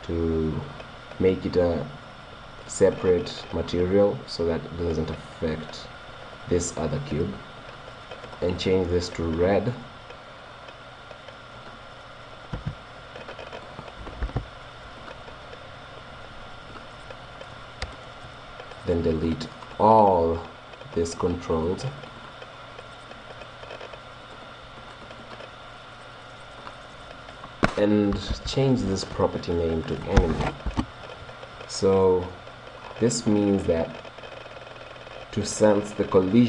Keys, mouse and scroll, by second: 2.7-4.5 drag, 4.5-6.6 middle drag, 8.3-10.1 drag, 16.8-18.6 drag, 19.0-24.1 drag, 23.9 right click, 24.1 middle click, 24.4-28.5 drag, 24.4 right click, 32.1-35.9 middle drag.